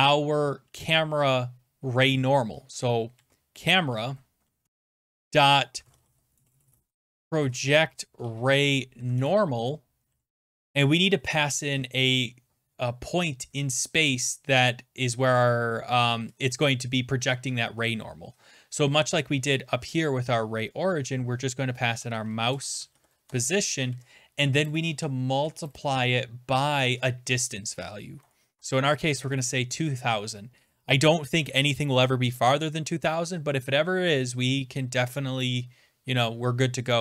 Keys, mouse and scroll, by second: 2.9-9.4 typing, 9.0 Down, 9.2 Return, 21.6-23.4 typing, 23.9 Right, 25.2-25.9 typing, 28.6-29.4 typing, 33.2 scroll, 35.5 click.